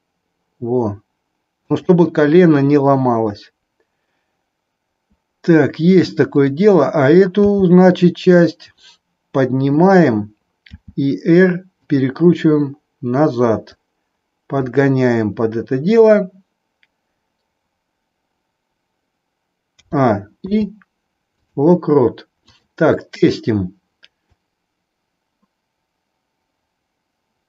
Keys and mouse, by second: 1.7 click, 6.2 click, 7.4 g, 10.7 r, 13.6-14.7 drag, 19.7 a, 20.5 i, 22.5 click, 24.4-27.4 drag.